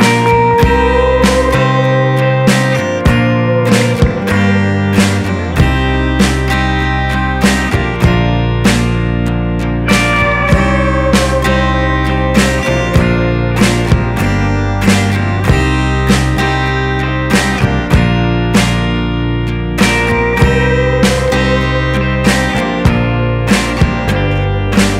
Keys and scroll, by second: 6.5 ctrl+0, 7.0 ctrl++, 17.9 ctrl+z.